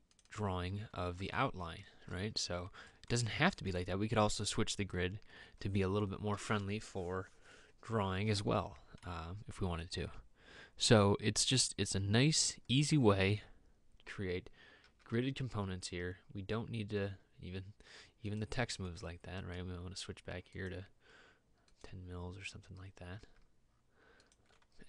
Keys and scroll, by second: 2.7 Escape, 15.0 m, 23.3 m.